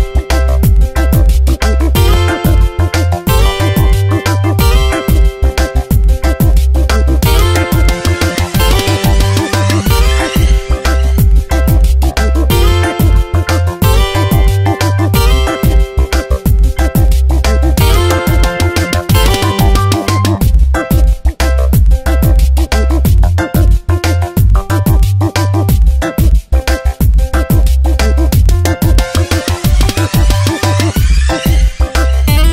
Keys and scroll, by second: 5.3 ctrl+t, 10.3 ctrl+t, 15.0 Return, 15.7 shift+Right, 18.8 space, 20.8 Tab, 30.3 b.